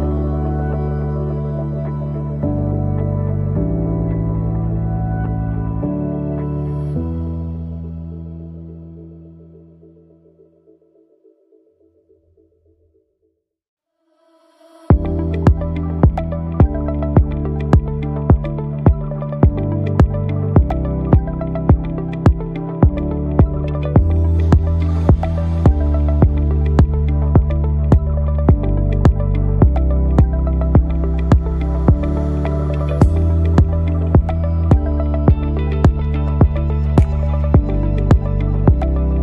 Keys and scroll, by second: 1.2 Delete, 13.5 ctrl+alt+d, 16.4 Return, 17.0 Return, 18.0 Return, 26.8 Delete, 31.5 ctrl+d, 33.3 space, 35.1 ctrl++, 35.6 ctrl++, 37.3 ctrl++.